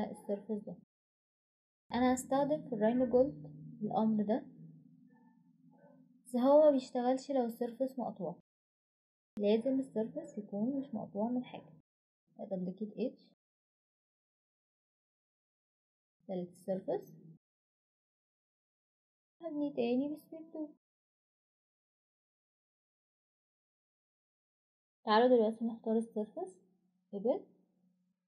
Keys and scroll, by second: 0.8-1.5 typing, 3.9-4.7 typing, 10.0 Escape, 16.6 Escape, 17.6 Delete.